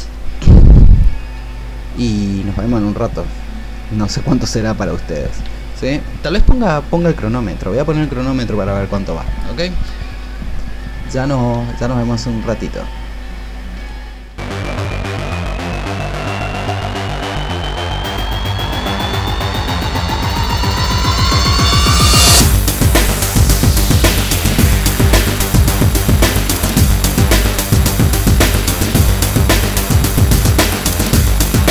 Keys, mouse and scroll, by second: 15.1 ctrl+z, 15.4 ctrl+z, 15.5 click, 15.7 shift+click, 15.9 ctrl+z, 16.0 ctrl+z, 16.1 click, 16.3 shift+click, 16.4 click, 16.9 ctrl+z, 17.1 ctrl+z, 17.2 shift+click, 17.6 ctrl+z, 17.7 click, 17.8 shift+click, 18.1 ctrl+z, 18.4 click, 19.1 click, 19.1 ctrl+z, 19.3 click, 19.4 ctrl+z, 19.5 alt+click, 19.6 shift+click, 20.0 click, 20.6 click, 20.8 shift+click, 21.6 click, 22.6 click, 22.9 shift+click, 23.5 alt+click, 23.8 click, 23.8 ctrl+z, 23.9 shift+click, 24.3 ctrl+z, 24.3 shift+click, 24.7 click, 24.9 shift+click, 25.4 shift+click, 26.3 click, 26.6 click, 26.7 click, 26.9 shift+click, 27.2 click, 27.2 ctrl+z, 27.4 alt+click, 27.9 click, 28.2 click, 28.8 click, 29.1 click, 29.3 shift+click, 29.5 click, 29.8 shift+click, 30.2 click, 30.3 ctrl+z, 30.4 typing, 30.7 click, 30.9 ctrl+z, 31.1 click.